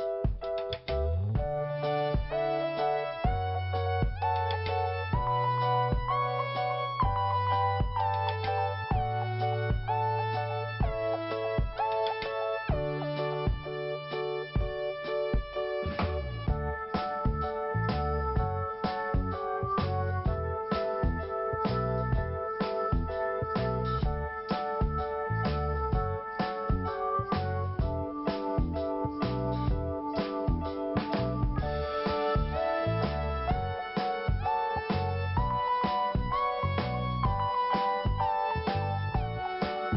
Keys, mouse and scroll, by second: 2.2 click, 3.4 click, 6.8 click, 9.0 scroll down 1, 9.9 click, 14.0 t, 14.7 scroll up 2, 15.8 click, 17.2 click, 19.6 click, 20.7 click, 21.8 scroll down 1, 22.9 scroll down 1, 23.0 click, 23.9 scroll down 2, 24.6 scroll up 2, 25.3 scroll down 1, 26.5 click, 28.7 click, 30.1 click, 30.3-31.2 scroll up 1, 32.4 scroll up 1, 33.1 click, 34.1 click, 35.9 scroll up 1, 37.2 click, 38.1 click.